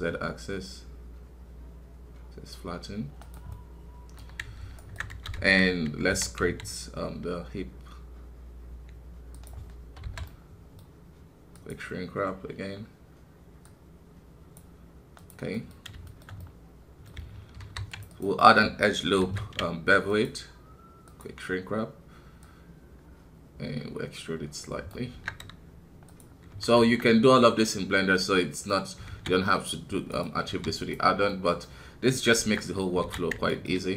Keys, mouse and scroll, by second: 3.5-5.3 middle drag, 5.3 KP_1, 6.1 e, 10.2-13.1 middle drag, 13.1-14.5 drag, 15.5 middle click, 15.8 scroll up 2, 16.0-17.6 shift+middle drag, 17.6 ctrl+r, 18.4 middle click, 19.2 ctrl+b, 21.0-26.5 drag, 26.5 KP_1, 26.7 Tab, 27.0 scroll down 1, 27.7-29.0 middle drag, 29.0 alt+a, 29.3-30.5 middle drag, 30.5 w, 31.3-32.4 middle drag, 32.4 Tab, 32.5 middle click, 33.0 alt+a, 33.5-33.9 alt+right drag.